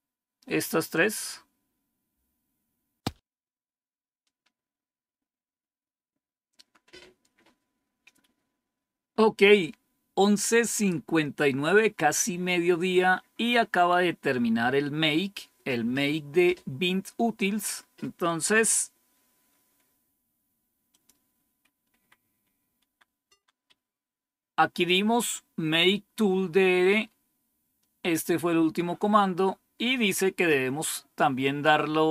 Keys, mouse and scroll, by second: 0.3-17.5 scroll up 1, 17.5 click, 20.8 click, 22.7 End, 23.6 Home, 26.9 scroll up 1, 28.8 scroll down 1.